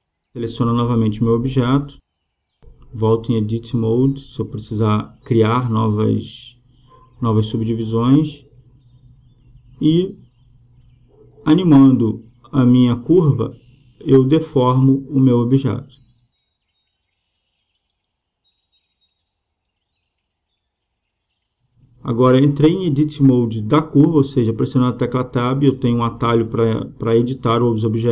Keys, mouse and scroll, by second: 2.5 right click, 4.2-5.9 drag, 6.8-8.0 drag, 8.0 Tab, 8.8 Tab, 9.8-10.9 drag, 11.6 click, 13.3-15.0 drag, 21.8-23.4 middle drag, 23.4 Tab, 24.4-26.0 right drag, 26.0 click, 26.0 e.